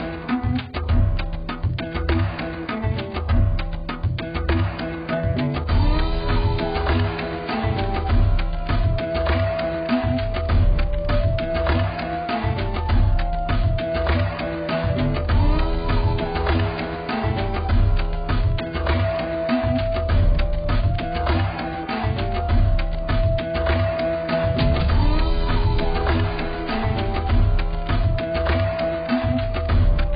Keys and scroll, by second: 13.3 ctrl+t.